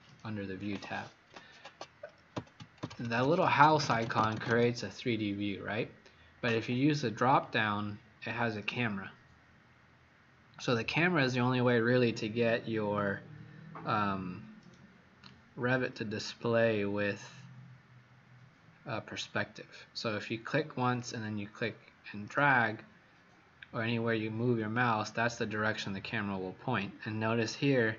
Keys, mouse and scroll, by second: 27.3-27.9 scroll down 4.